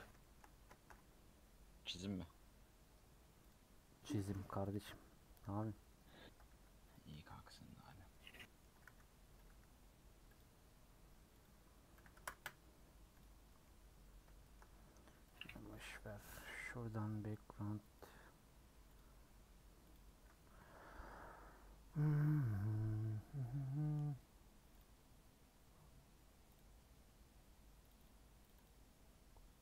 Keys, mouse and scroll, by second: 0.2-3.5 shift+middle drag, 3.5 shift+a, 3.7 scroll down 1, 4.2 g, 4.9 r, 6.3 r, 7.1 r, 8.1 middle click, 8.6 r, 9.4 r, 12.3 click, 13.3-14.1 scroll up 4, 13.4 middle click, 14.4 scroll up 1, 14.4 shift+middle click, 14.8-15.3 scroll down 4, 15.3 click, 15.8 x, 19.1-29.6 drag.